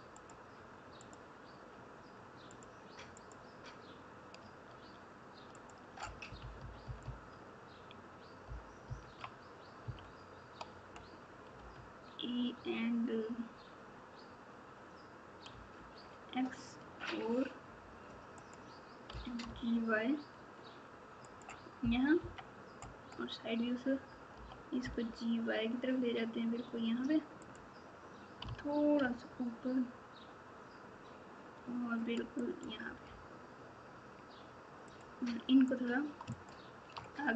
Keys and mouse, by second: 0.1 click, 5.5 shift+click, 6.5 KP_4, 8.8 KP_4, 9.8 KP_6, 19.1 g, 22.1 KP_3, 24.3 g, 28.4 g, 36.3 shift+click.